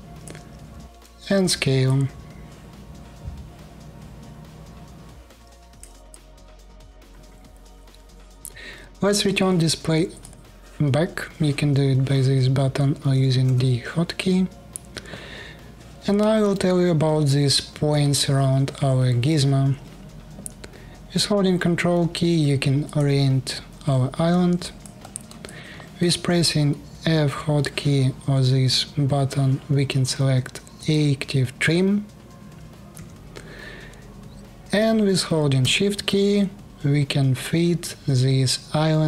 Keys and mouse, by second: 0.6 s, 3.6-5.6 drag, 5.9 alt+click, 6.5 alt+click, 8.4 click, 12.7 click, 12.7 d, 13.1 d, 22.6 ctrl+click, 24.2 alt+click, 24.7 alt+middle click, 25.2 alt+middle click, 25.5 alt+middle click, 26.7 f, 32.6 f.